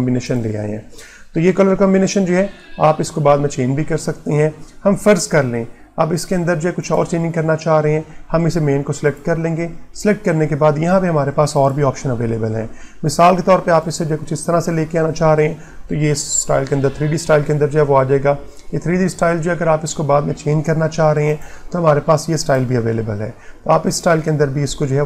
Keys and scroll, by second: 2.6 Print, 18.6 Print.